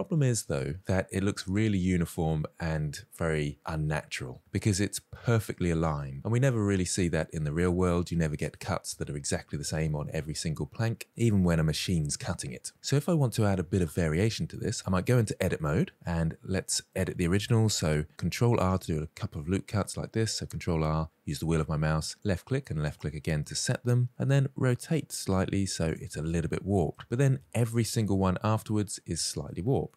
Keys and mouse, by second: 0.8-3.1 middle drag, 6.0-7.0 middle drag, 13.8 click, 14.6 Tab, 15.0-15.6 shift+middle drag, 16.9 middle drag, 18.4 ctrl+r, 22.2 click, 24.2 r, 25.8 click, 26.1 middle click, 27.3 shift+middle click, 28.8 shift+middle drag, 29.3-29.9 middle drag.